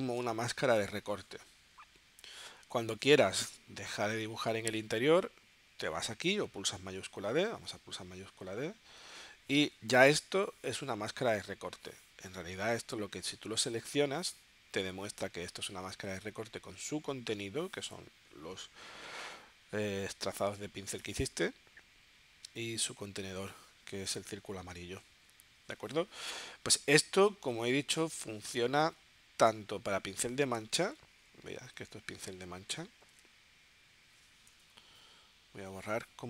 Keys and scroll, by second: 28.1 space, 30.9 super+y, 34.6 BackSpace.